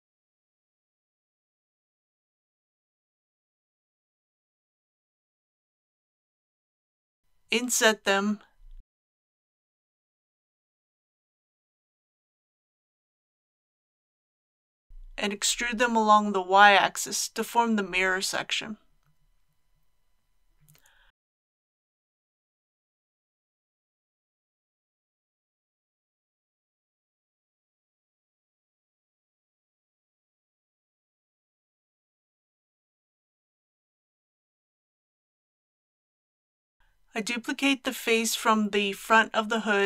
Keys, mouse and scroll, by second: 2.1 scroll up 1, 2.3 scroll down 1, 2.8 shift+middle click, 4.3 click, 4.8 shift+click, 6.3 shift+click, 8.8 i, 11.2 click, 13.6 middle click, 15.2 e, 15.6 y, 21.9 shift+click, 22.8 alt+a, 23.7 scroll down 1, 24.7-31.3 middle drag, 36.2 shift+middle click, 37.7 shift+3, 38.0 click, 39.3 KP_1.